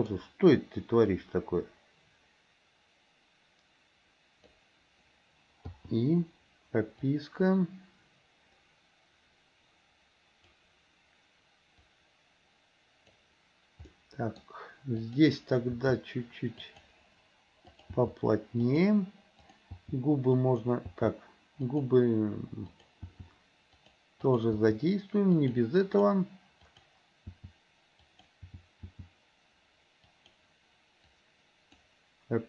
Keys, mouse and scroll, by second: 1.2-4.7 drag, 5.8 i, 7.2-10.7 drag, 11.9-13.3 drag, 13.9 middle click, 14.4 scroll down 1, 15.1 click, 15.7 g, 17.8 click, 18.1 g, 19.4 click, 19.9 g, 21.0 g, 22.8 click, 23.1 g, 24.3 click, 26.0 click, 26.6 click, 27.4 g, 28.4 g, 31.3-31.9 drag.